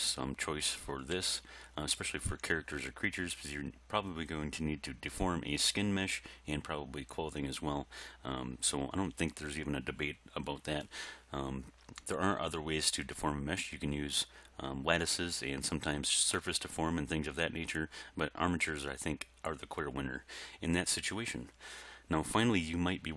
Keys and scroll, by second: 1.2 g.